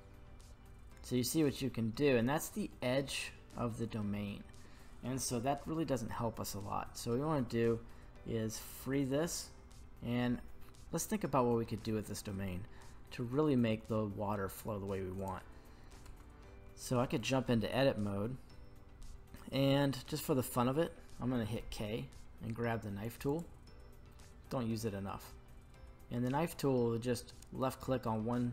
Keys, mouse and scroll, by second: 1.3 click, 2.1-2.6 middle drag, 8.6 click, 10.1-10.6 scroll down 3, 10.6-11.7 middle drag, 15.2 right click, 16.2 Tab, 16.9 middle click, 20.1-21.5 scroll up 3, 21.5 k.